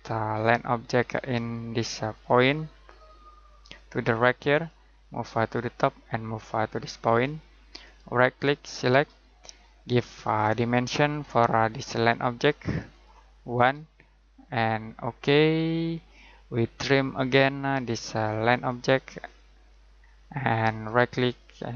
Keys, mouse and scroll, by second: 2.1 click, 8.7 click, 13.5 1, 14.8 click, 19.9 scroll down 1, 20.1-20.8 scroll up 1, 20.8 right click.